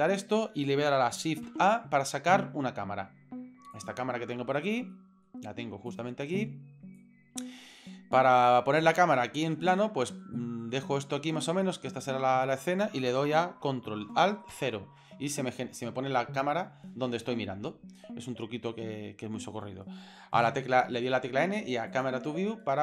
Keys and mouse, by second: 1.4 shift+a, 4.9-5.2 middle drag, 5.9-6.4 drag, 7.0-7.4 drag, 7.7-8.4 middle drag, 9.2 shift+middle click, 9.5 middle click, 10.3 shift+middle drag, 10.7-11.6 middle drag, 11.7 shift+middle click, 12.7 shift+middle click, 20.4 n, 21.9 click, 22.6-22.8 shift+middle drag.